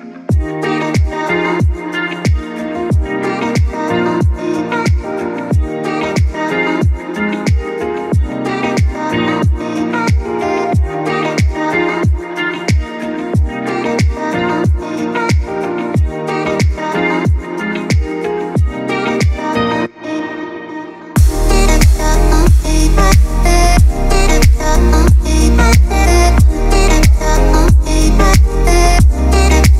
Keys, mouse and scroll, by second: 0.4-2.9 drag, 2.9-4.2 drag, 4.2 ctrl+z, 5.3-8.5 drag, 9.9-14.0 drag, 15.6-19.1 drag, 19.1 ctrl+z, 20.2-22.0 drag, 24.5-26.7 drag, 29.6 space, 29.6 click.